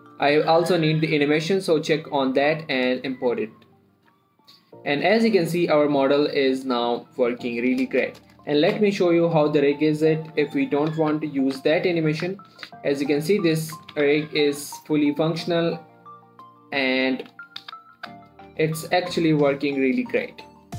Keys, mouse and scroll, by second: 1.5-3.1 scroll down 1, 3.1 click, 4.7 middle click, 5.0-5.4 scroll up 1, 5.4 space, 7.0 click, 7.3 middle click, 8.3 space, 9.1 shift+Left, 9.7 click, 10.0 middle click, 10.7 Tab, 11.4 a, 11.9 alt+r, 12.2 middle click, 12.6 z, 12.8 middle click, 13.0 1, 13.4 click, 14.1-14.7 typing, 15.7 right click, 16.3 click, 18.1-18.8 typing, 19.3 right click, 19.8 click, 20.0 r, 20.5 right click.